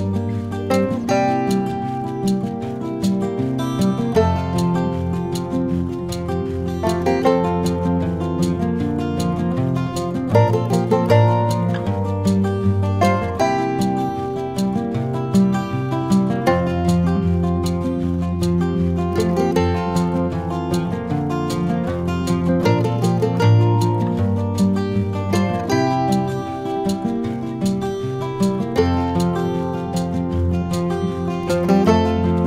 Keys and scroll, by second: 10.1 4, 21.3 r.